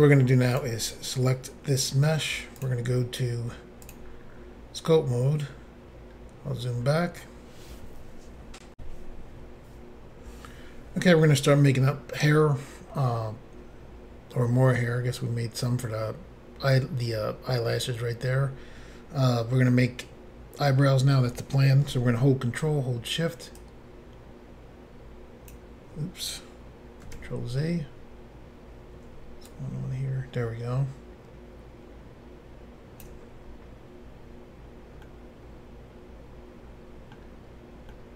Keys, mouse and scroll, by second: 0.6 click, 0.6 click, 2.6 click, 3.9 click, 4.0 click, 6.1 scroll down 1, 6.8-7.3 scroll down 1, 8.8 Insert, 20.2-21.4 scroll up 1, 23.6 ctrl+click, 27.2 ctrl+shift+z, 29.5 ctrl+click, 35.1 middle click, 38.0 middle click.